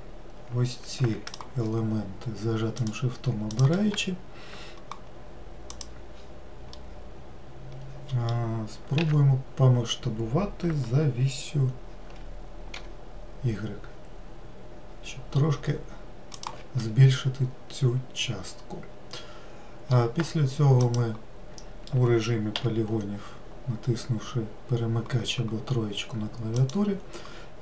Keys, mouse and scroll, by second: 3.4 shift+click, 5.6-6.6 drag, 6.6-8.9 middle drag, 8.9 s, 16.7-19.8 middle drag, 20.7 click, 22.5 3, 26.5 click.